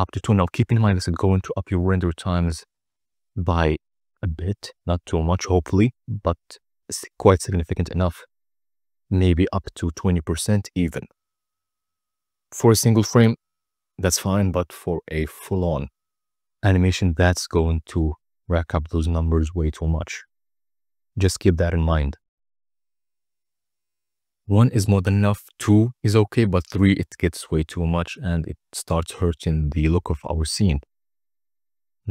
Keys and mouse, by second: 2.8 click, 5.5-11.1 drag, 17.5-19.1 drag, 20.1 click, 25.4-25.8 middle drag, 26.9 middle click, 28.2 shift+a.